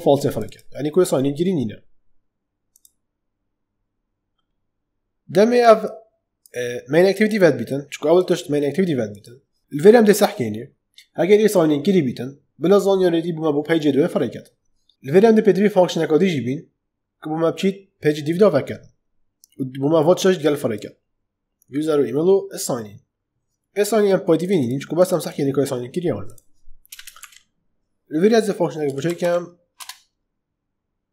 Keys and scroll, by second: 26.8 Return, 27.1 Up, 28.5-29.7 typing, 31.0-31.1 typing.